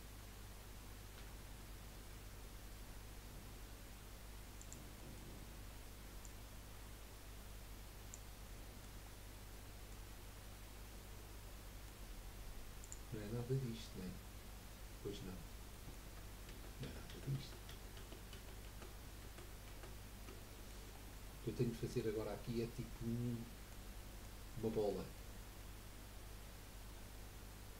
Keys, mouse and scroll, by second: 1.1 i, 5.1-6.2 middle drag, 6.2 click, 8.5 middle click, 9.1 scroll down 3, 9.3 middle click, 10.1 scroll up 2, 10.4-13.5 middle drag, 15.7 middle click, 16.5 ctrl+z, 16.8 ctrl+z, 17.1 ctrl+z, 17.4 ctrl+z, 17.7 ctrl+z, 18.0 ctrl+z, 18.6 ctrl+z, 19.2 ctrl+z, 19.7 ctrl+z, 20.5 middle click, 20.9-21.3 scroll down 2, 21.3 middle click, 22.2 scroll up 1, 22.6-27.7 middle drag.